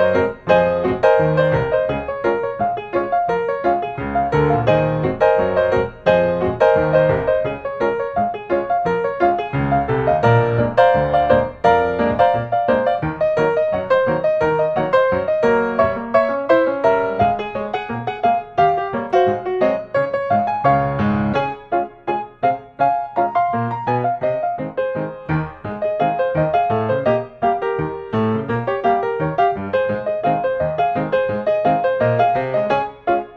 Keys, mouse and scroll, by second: 1.9 click, 2.1 Escape, 3.3 click, 5.1-5.6 drag, 6.9 click, 9.3-9.7 scroll, 10.9 click, 11.8 Escape, 12.7 click, 13.0-13.6 scroll, 14.3-14.7 scroll, 15.5 click, 17.1 click, 18.1 scroll, 19.2 middle click, 19.4 Escape, 19.4 middle click, 20.5 click, 22.4 click, 23.1-25.1 scroll, 25.5 click, 26.9 click, 28.2 click, 29.2 click, 30.6 click, 31.1-31.7 scroll, 31.8 Escape, 31.9 click, 32.3 click.